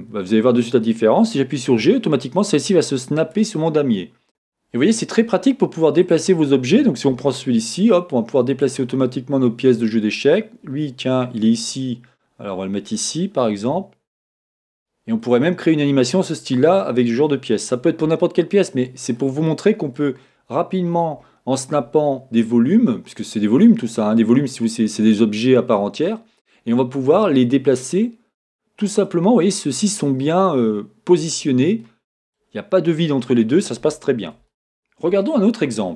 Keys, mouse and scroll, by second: 1.7 g, 3.3 middle click, 4.3 click, 4.3-4.8 scroll down 2, 4.8-10.1 middle drag, 6.0 click, 7.1 g, 8.6 click, 13.7 g, 14.8 click, 16.5-32.4 middle drag, 20.3-24.4 scroll up 2, 32.6-34.5 scroll up 1, 34.5 shift+middle click, 35.1 scroll up 1, 35.4-35.8 scroll down 1.